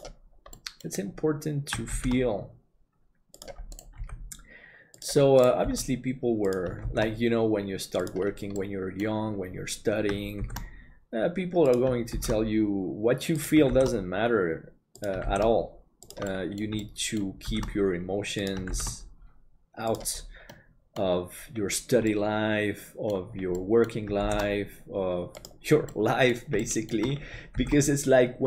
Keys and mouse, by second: 0.7 middle click, 4.0 g, 5.4 right click, 6.5 g, 6.9 shift+d, 8.7 middle click, 10.4 shift+d, 16.4 middle click, 16.9 shift+middle click, 20.5 middle click, 22.1 middle click, 23.6 middle click, 24.3 shift+d, 26.0 middle click, 26.7 middle click, 27.6 shift+d.